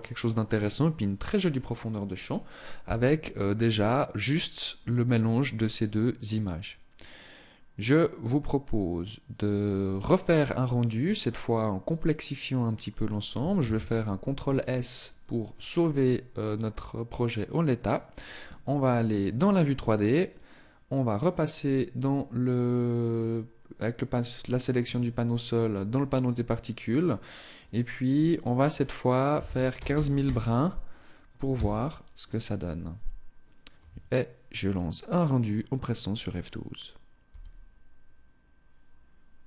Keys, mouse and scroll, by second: 16.8 click, 19.6 click, 22.4 click.